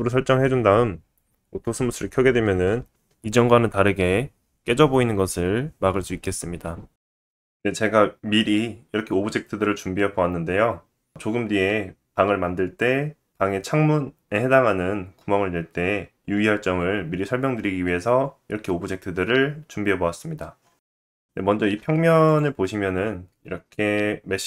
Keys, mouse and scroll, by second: 5.9-6.6 right drag, 20.8 shift+middle click, 20.8 click, 20.8-21.4 scroll up 2, 21.7 x, 22.1 shift+a, 24.1 s.